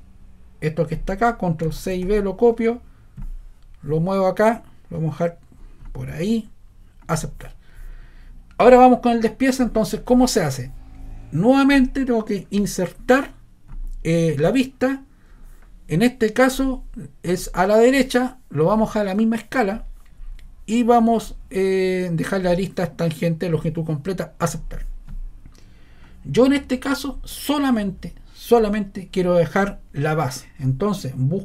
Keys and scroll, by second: 1.8 super+c, 2.0 super+v.